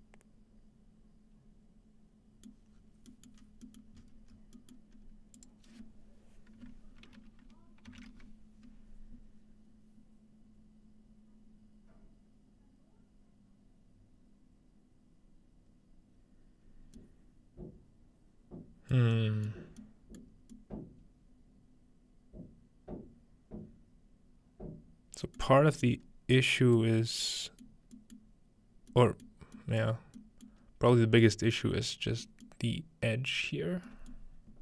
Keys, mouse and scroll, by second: 2.7-3.4 scroll down 2, 3.4 middle click, 3.4 scroll up 2, 3.8 middle click, 4.0-4.4 scroll up 4, 4.8 middle click, 4.9-5.4 scroll up 1, 5.4-7.4 drag, 11.9-13.0 scroll down 2, 13.0-13.9 scroll down 1, 13.9-14.7 scroll down 1, 14.7-15.4 scroll down 1, 15.4-16.7 scroll down 1, 16.7-17.0 scroll up 3, 17.0 middle click, 19.0 middle click, 19.5 middle drag, 20.2 middle click, 25.4-26.4 middle drag, 26.0-27.0 scroll up 1, 26.8 middle click, 27.0-27.9 scroll down 1, 27.6 middle click, 28.1 scroll up 1, 28.2-28.7 middle drag, 28.6 scroll up 1, 28.7 scroll down 1, 29.4 middle click, 29.8-30.2 middle drag, 29.8-30.2 scroll down 1, 30.4 scroll down 1, 30.5 middle click, 30.6-32.2 scroll up 3, 31.6 middle click, 32.2-33.2 scroll up 1, 32.5-33.9 middle drag, 34.3 middle click.